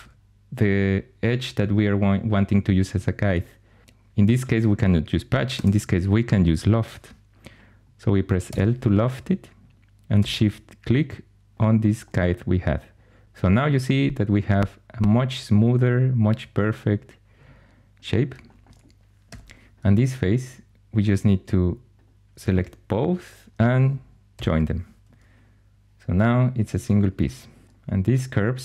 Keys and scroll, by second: 5.4 Escape, 8.4 i, 19.2 4, 24.2 j, 27.6 2.